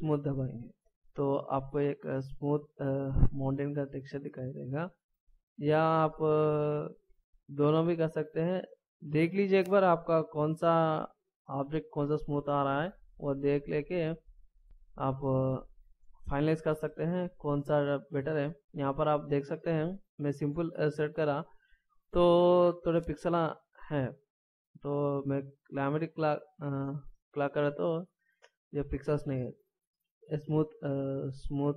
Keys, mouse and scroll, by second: 0.8 scroll down 1, 1.4 middle click, 5.2 click, 8.0 click, 8.8 click, 10.0 click, 14.4 click, 17.1 middle click, 20.9 middle click, 25.0 click, 28.2 middle click.